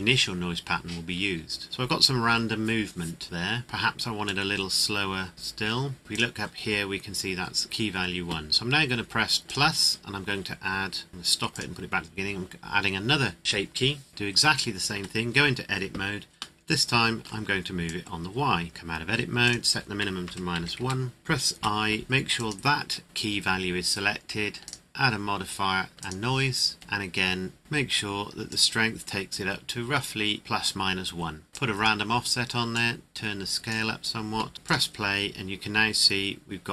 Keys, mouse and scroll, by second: 4.2 click, 9.4 click, 14.9 Tab, 16.5 middle click, 17.8 click, 18.7 Tab, 19.4 click, 20.3 KP_Subtract, 20.5 KP_1, 20.7 KP_Enter, 22.3 click, 24.6 click, 27.6 scroll down 1, 28.5 click, 31.8 click.